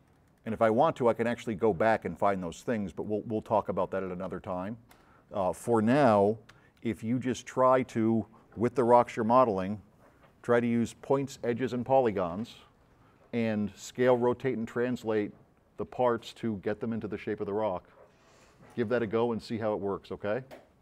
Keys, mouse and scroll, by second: 4.1 click, 5.0 click, 6.3 d, 6.6 s, 6.8 right click.